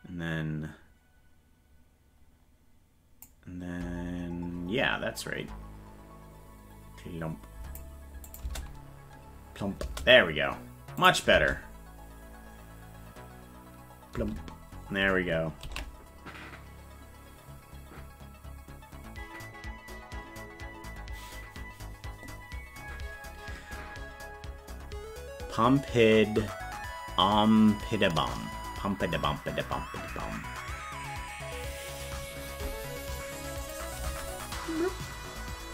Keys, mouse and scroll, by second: 5.2-7.8 drag, 8.3 click, 11.0 click, 11.3 space, 14.8 space, 15.8 ctrl+s, 33.6 click, 34.1 space.